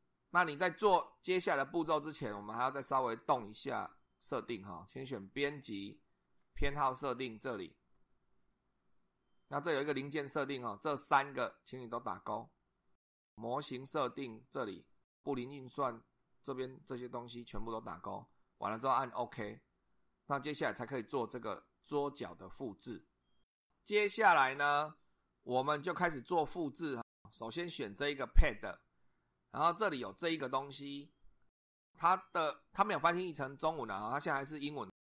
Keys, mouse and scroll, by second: 3.4 click, 5.3 click, 6.4 click, 9.8 click, 19.2 click, 28.3 click.